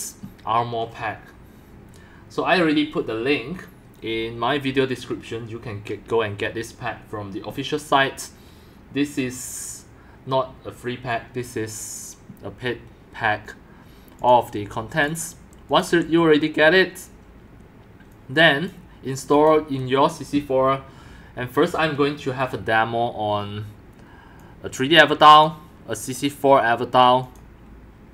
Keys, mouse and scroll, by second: 14.2 click, 14.9 click, 15.0 click, 15.7 click, 15.8 BackSpace, 18.1 click, 19.3 click, 22.2 click, 24.4 click.